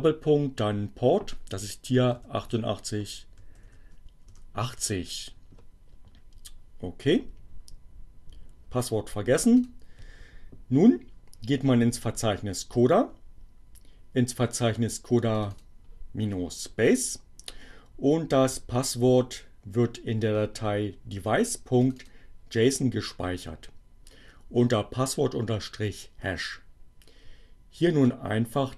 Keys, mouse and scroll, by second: 0.4 8, 2.6-3.4 typing, 4.4 Return, 9.3 click, 14.8 click, 20.9 click, 25.8-28.5 drag.